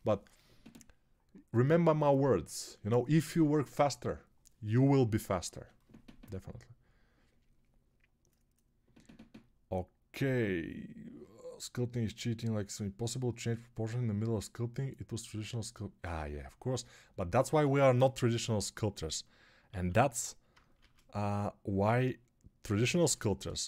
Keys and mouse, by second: 19.6 alt+q, 20.6 shift+r, 23.0 ctrl+r.